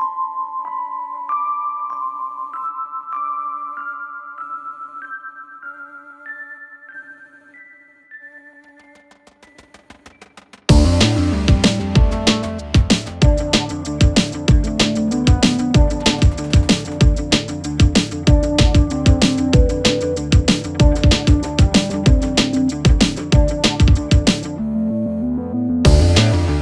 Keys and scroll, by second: 0.3 4, 4.2 ctrl+F1, 6.5 2, 7.1 f, 9.5 4, 14.3 1, 16.3 Escape, 23.2 ctrl+z, 23.6 4, 24.8 3.